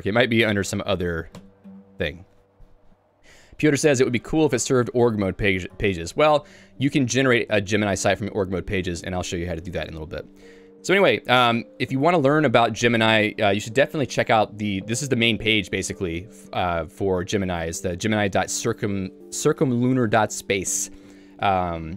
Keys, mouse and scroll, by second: 1.4 u, 16.7 k, 20.9 j.